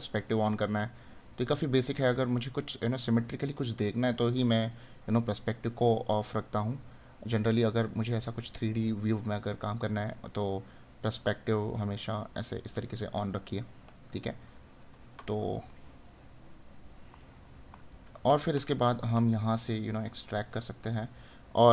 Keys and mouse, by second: 13.3 right click, 17.3 right click.